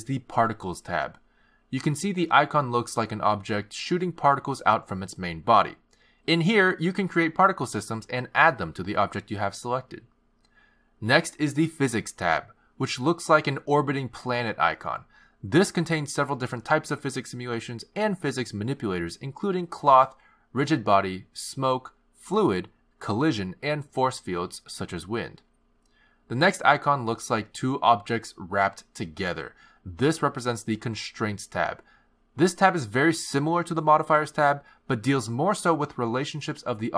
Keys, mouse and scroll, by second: 2.4 click, 7.6 click, 12.9 click, 27.9 click, 30.8 click, 33.3 click, 35.4 click.